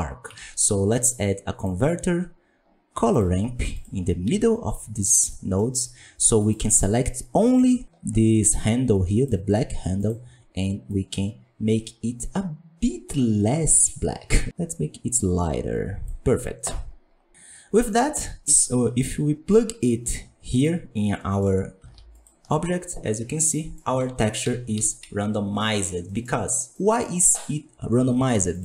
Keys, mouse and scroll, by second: 4.2 g, 6.4-10.8 drag, 17.3-20.6 drag, 22.1 ctrl+shift+click, 23.0-23.5 scroll down 8, 23.5 middle click, 23.8 alt+a, 24.7 KP_1, 24.9 KP_5, 25.4-25.8 scroll down 2, 28.4-28.6 drag.